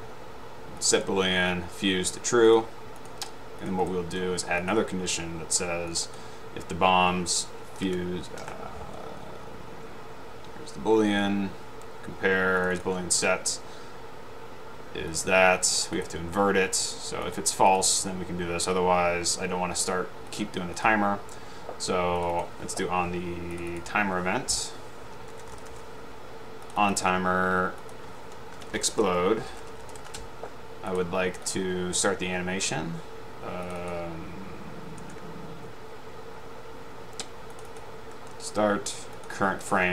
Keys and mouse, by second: 1.0 click, 2.6-2.9 drag, 6.2 click, 8.6 BackSpace, 12.7 click, 15.2 click, 16.0 right click, 17.4 click, 20.4-20.9 drag, 22.3 click, 23.8 click, 25.4-26.4 typing, 26.8-27.5 drag, 27.9 click, 28.7 Left, 28.8-30.4 typing, 31.0-31.9 drag, 33.7 click, 34.0 click, 37.7 click, 39.2-39.7 drag, 39.8 click.